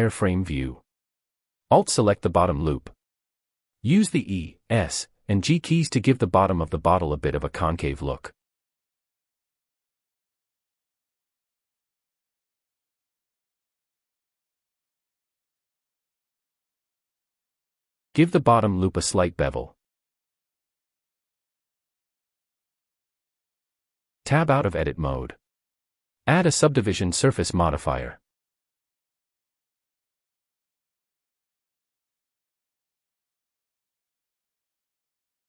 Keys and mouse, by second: 0.1 click, 0.8 alt+click, 2.4 e, 2.8 s, 4.4 click, 4.8 g, 5.1 z, 6.1 click, 6.5 e, 6.9 s, 8.7 g, 8.7 z, 9.8 click, 10.2 e, 10.8 s, 12.4 g, 12.6 z, 13.9 click, 14.9 e, 15.0 s, 16.1 g, 16.3 z, 18.2 click, 19.9 alt+click, 20.8 ctrl+b, 23.2 shift+click, 23.4 shift+middle click, 25.3 Tab, 27.6-31.1 drag, 33.3 click.